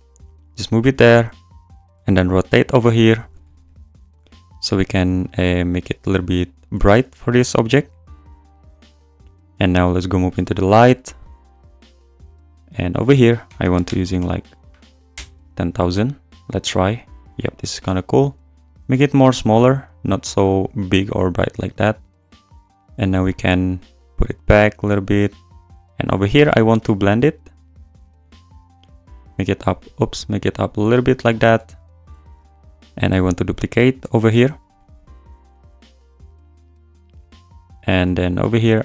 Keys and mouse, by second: 0.1 g, 0.5 click, 0.6 `, 2.0-3.2 r, 3.4 `, 4.3 e, 5.2 click, 6.1 click, 6.7 e, 7.7 r, 10.3 click, 12.9-15.2 drag, 13.6 BackSpace, 14.0 0, 14.2 0, 17.8-21.7 drag, 22.7 g, 25.2 click, 26.5-27.8 drag, 28.8 g, 31.1 click, 32.3 shift+f, 32.9 shift+d, 33.1 click, 34.0 g, 35.5 r, 37.6 drag, 38.0 `.